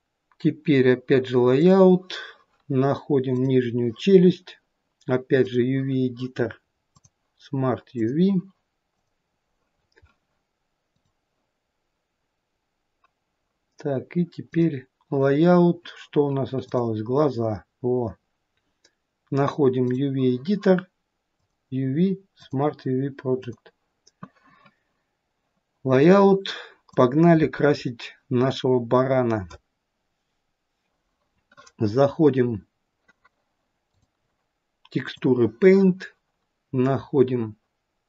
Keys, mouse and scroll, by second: 1.8 click, 3.3 click, 14.6 click, 16.7 click, 26.1 click, 27.0 click, 33.9 click.